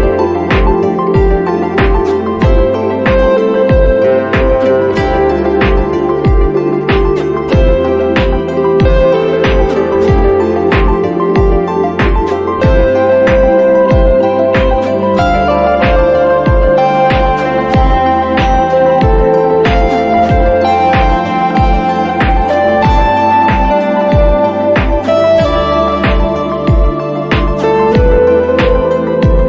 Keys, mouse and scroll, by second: 0.0 scroll down 1, 0.1 click, 0.8-2.0 drag, 2.1 click, 2.1 space, 2.3 click, 2.3 space, 2.6 click, 4.6 [, 4.7 [, 5.0 ], 5.2 alt+click, 5.6 click, 8.7 ctrl+d, 9.8 scroll up 1, 10.5-11.4 scroll up 1, 18.1-19.0 scroll down 1, 19.0 click, 25.9 click, 26.2 click, 26.8 click, 27.6 click, 28.7 click.